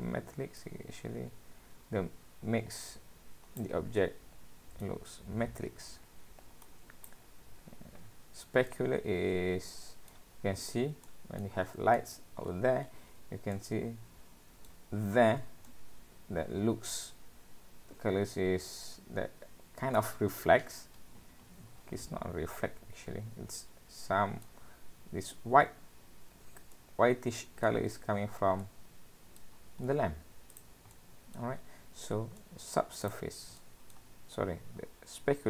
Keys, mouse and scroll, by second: 0.6 click, 4.0 middle click, 6.7 click, 8.7 middle click, 11.1 middle click, 11.6-13.1 scroll down 7, 12.0 middle click, 12.8-15.0 scroll up 7, 13.5 middle click, 15.0-15.7 scroll up 1, 15.7 middle click, 15.7-16.5 scroll up 1, 26.7 middle click, 28.1-28.6 scroll down 3, 28.6 middle click, 29.5-30.4 scroll down 4, 30.4 scroll down 1, 30.6 click, 31.0 middle click, 31.6-33.1 scroll up 10, 32.4 middle click, 33.1 click, 33.6 middle click, 34.5 scroll down 2.